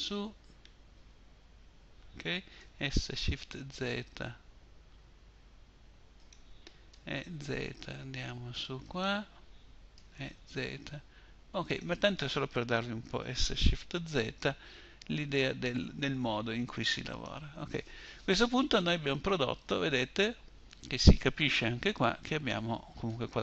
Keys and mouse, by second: 1.8 s, 6.1 e, 9.2 e, 10.2 middle click, 12.5 s, 13.3-15.6 middle drag, 16.5-20.0 middle drag, 22.6-23.4 middle drag.